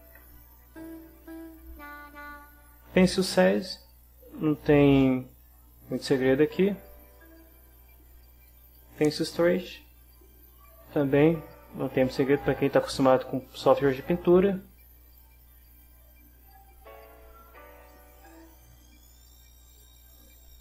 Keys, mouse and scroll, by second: 0.0 Up, 3.3-7.3 drag, 8.5-11.1 drag, 15.2-20.4 right drag.